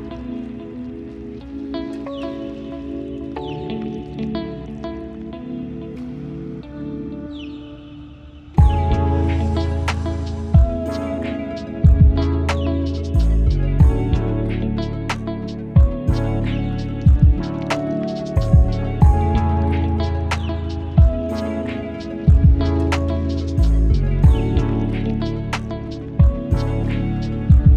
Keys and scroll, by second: 2.2 ctrl+z, 2.7 Delete.